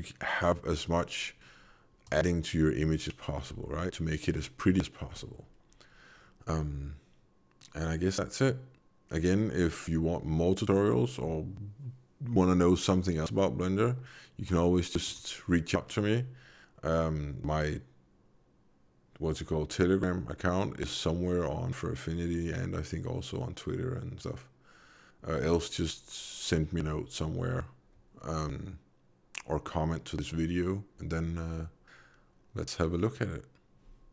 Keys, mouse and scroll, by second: 2.0 click, 3.6 middle click, 15.0 click.